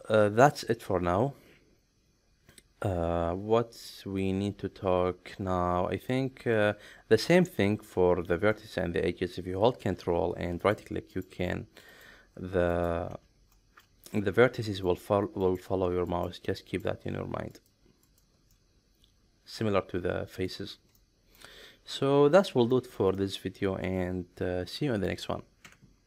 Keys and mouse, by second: 7.5 shift+middle click, 7.9 middle click, 10.6 ctrl+right click, 11.1 ctrl+right click, 11.9 ctrl+right click, 12.7 ctrl+right click, 13.5 shift+middle click, 14.1 middle click, 14.9 ctrl+right click, 16.1 ctrl+right click, 16.6 ctrl+right click, 17.5 ctrl+right click, 18.1 ctrl+right click, 18.5-20.4 middle drag, 21.0 middle click, 22.0 middle click, 22.7 shift+middle click, 23.2-25.1 middle drag, 25.6 Tab.